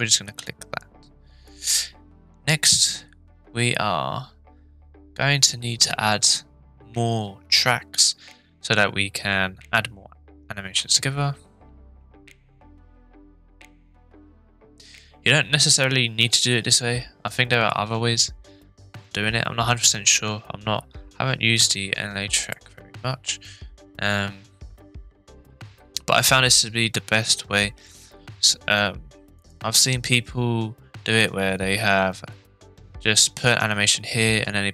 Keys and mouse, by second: 1.4 click, 22.5-29.5 drag.